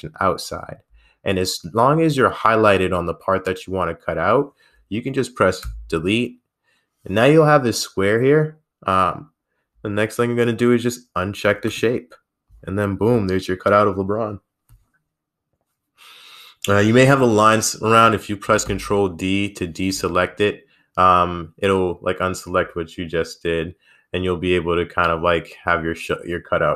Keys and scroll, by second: 5.8 Delete.